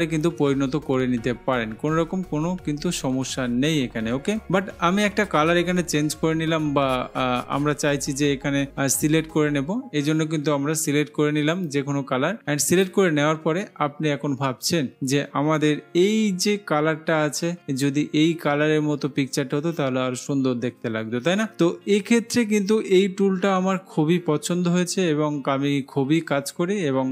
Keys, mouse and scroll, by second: 13.0-14.0 drag.